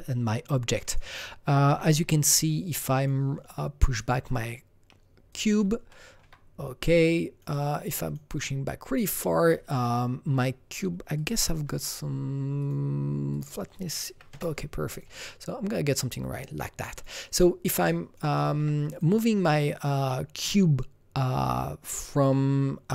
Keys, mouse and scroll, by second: 0.1 scroll down 1, 0.1-0.9 scroll down 3, 0.9 click, 1.7 w, 2.3-5.3 drag, 5.3 click, 5.9 alt+middle click, 7.1-11.2 drag, 9.8-13.3 alt+middle drag, 12.6 click, 13.3 click, 13.5 double click, 14.1 KP_1, 14.3 KP_Enter, 14.9 click, 16.9 click, 17.0 click, 17.9 alt+right click, 18.4 alt+middle click, 18.9 click, 22.2-22.9 drag, 22.2 alt+middle click.